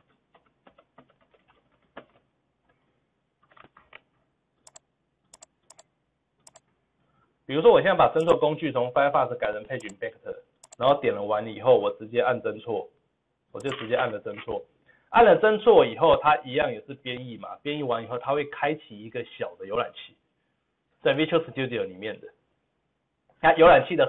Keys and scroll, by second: 3.6 ctrl+z.